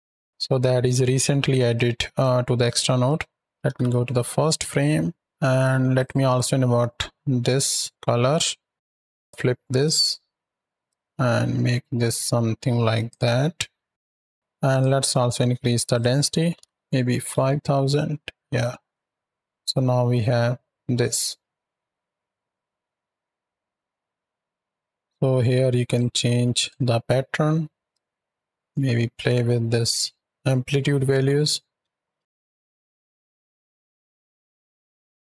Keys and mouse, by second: 1.5 click, 2.0-2.9 drag, 3.2 click, 3.5 shift+Right, 3.5 shift+Left, 5.8 drag, 8.7 KP_7, 9.0-9.7 drag, 10.7-13.0 drag, 14.3 click, 15.8-17.2 drag, 18.7 shift+click, 18.9 space, 25.0 shift+Left, 25.0 space, 25.7 click, 26.4 click, 27.8-31.3 drag, 31.7 space, 33.8 click.